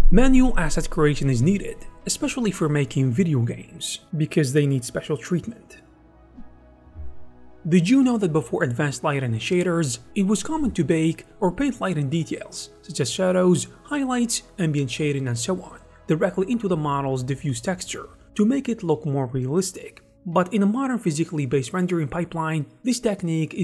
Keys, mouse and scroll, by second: 12.2 g.